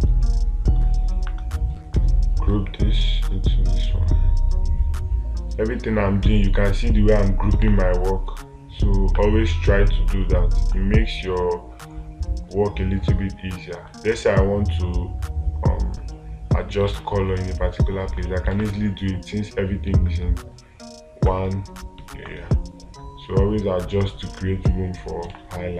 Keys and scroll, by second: 8.1 space, 17.3 space, 19.0 space.